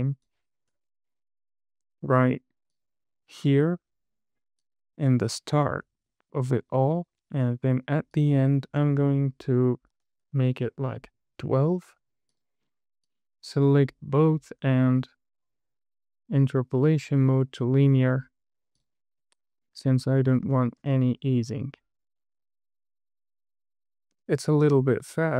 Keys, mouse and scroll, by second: 3.1 click, 5.0 click, 5.6-6.4 scroll down 4, 6.4 shift+middle click, 7.3 click, 8.5-11.0 drag, 12.7 click, 13.4 click, 14.7-18.0 right drag, 19.1 click, 19.9 scroll down 1, 20.2 shift+middle click, 21.1 space, 24.5 space.